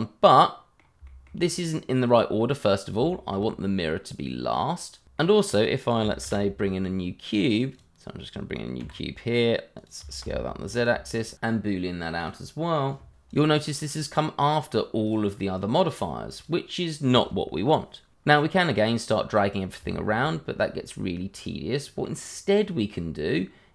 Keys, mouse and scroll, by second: 1.2 shift+middle click, 1.4-2.9 scroll up 1, 3.1 shift+middle click, 3.1 middle click, 3.2 shift+middle click, 5.1 middle click, 6.2 shift+a, 7.7 click, 8.8 g, 9.7 click, 10.0 s, 10.2 z, 10.7 click, 11.1 shift+click, 11.2 click, 11.8 v, 11.9 BackSpace, 11.9 b, 11.9 o, 12.2 click, 13.0 h, 13.2 click, 19.3-19.8 scroll up 1, 19.9 shift+middle click, 20.0 middle click, 20.0 shift+middle click, 20.4 middle click, 22.3 scroll down 1.